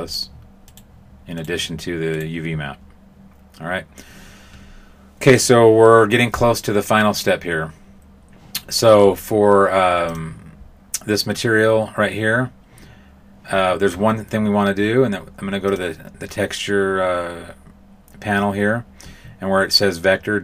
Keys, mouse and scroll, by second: 0.0 right click, 0.6 right click, 1.3 right click, 2.1 right click, 10.0 click, 15.6 click.